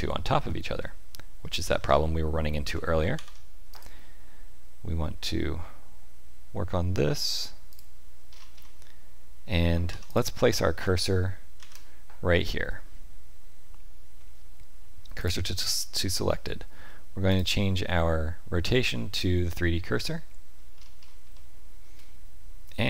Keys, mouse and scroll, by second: 1.8-2.7 scroll up 2, 2.7-3.0 scroll up 1, 3.1 ctrl+r, 8.3-8.7 scroll up 4, 9.2-9.9 scroll up 2, 9.9 3, 10.0 click, 11.5 shift+s, 17.2 click, 19.9 middle click, 20.7-21.1 scroll up 3, 21.3 shift+middle click.